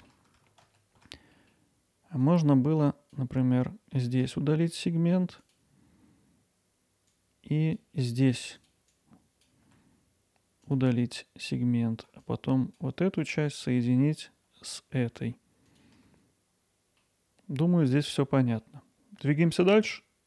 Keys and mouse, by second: 0.6 ctrl+z, 1.4 middle click, 2.3-3.7 drag, 4.3 x, 7.2-9.7 drag, 9.7 x, 12.3 click, 13.4 shift+click, 15.0 f, 15.7-16.8 drag, 17.0-18.6 middle drag, 17.1 f.